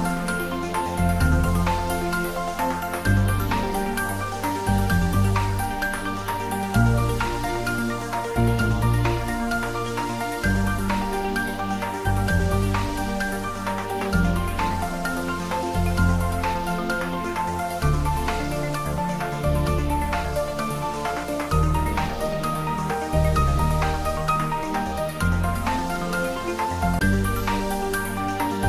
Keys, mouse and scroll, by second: 0.2 shift+a, 0.8 scroll down 1, 1.8 middle click, 2.8 shift+z, 3.5 scroll down 1, 4.0 shift+z, 5.0 shift+a, 7.7 click, 9.3 s, 11.4 click, 13.1 scroll up 1, 13.9 shift+z, 14.3 scroll up 1, 18.0 g, 20.4 click, 21.4 scroll down 1, 22.0-23.5 middle drag, 23.5 shift+z, 24.1 middle click, 24.8 scroll down 1, 25.9 s, 27.3 click, 27.7-28.6 middle drag.